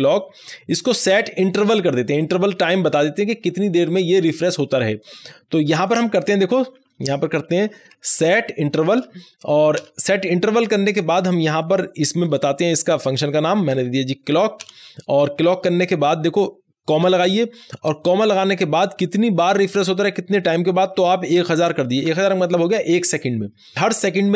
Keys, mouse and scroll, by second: 0.0-2.0 drag, 2.4-4.4 scroll down 1, 4.9-7.0 drag, 7.0-8.4 typing, 9.7 Return, 12.2 shift+Return, 12.3 shift+9, 13.5-14.2 typing, 14.5 Return, 17.0 Return, 19.1 ,, 20.6-22.5 typing.